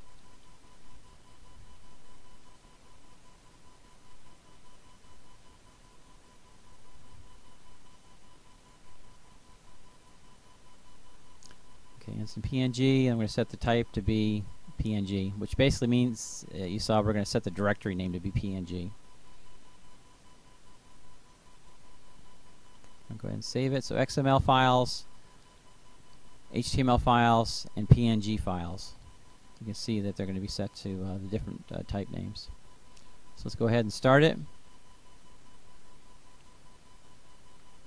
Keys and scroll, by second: 0.4 ctrl+space, 1.3 Down, 2.7 Return, 3.8-8.1 typing, 12.7-14.0 typing, 15.3-16.6 typing.